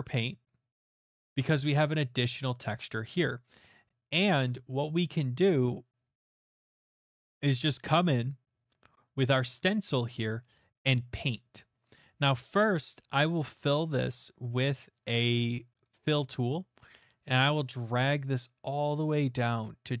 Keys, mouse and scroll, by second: 0.5 click, 0.8 middle click, 0.9 middle click, 1.4 middle click, 6.2 middle click, 6.5-7.3 scroll, 12.3 middle click, 15.8 click, 18.4 click.